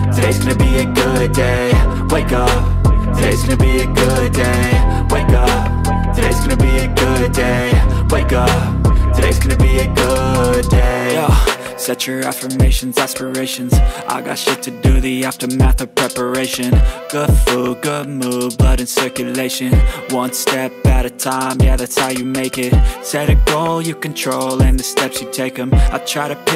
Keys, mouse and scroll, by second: 3.9 alt+click, 5.2 alt+click, 8.6 ctrl+space, 8.7 ctrl+click, 9.1 ctrl+space, 9.9 space, 10.1 ctrl+click, 10.3 ctrl+double click, 12.0 right click, 16.2 space, 16.6 ctrl+click, 20.8 space, 22.2 alt+click, 22.2 alt+double click, 23.4 ctrl+click.